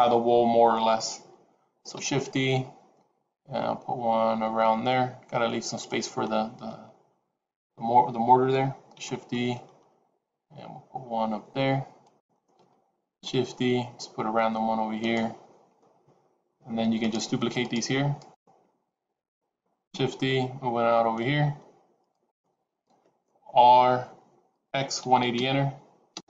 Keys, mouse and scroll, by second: 1.9 shift+d, 9.1 shift+d, 13.3 shift+d, 16.9 shift+click, 17.5 shift+click, 18.5 shift+click, 19.9 shift+d, 23.4 r.